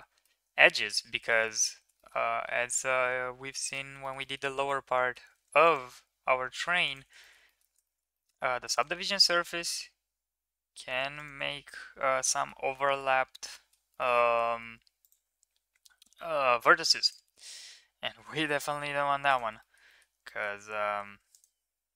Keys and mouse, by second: 0.0 middle click, 1.1 shift+middle click, 1.8 shift+middle click, 2.2 ctrl+r, 3.9 middle drag, 4.6-5.0 middle drag, 5.2 ctrl+r, 7.0 shift+middle click, 7.7 shift+middle click, 8.4 ctrl+r, 11.3 middle click, 12.2 shift+middle click, 12.7 middle click, 13.4 shift+middle click, 14.2 ctrl+r, 16.5 ctrl+r, 19.5 middle click, 20.2 middle click, 20.9 ctrl+r.